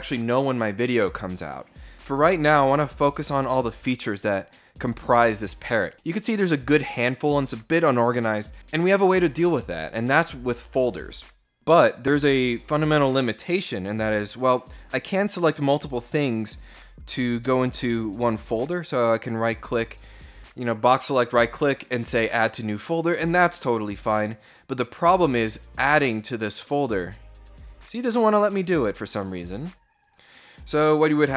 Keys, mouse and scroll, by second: 13.3-14.8 drag, 15.7 right click, 18.2 click, 22.5 click, 25.4 click, 26.9 click, 28.0 click, 29.7 click, 30.5 click.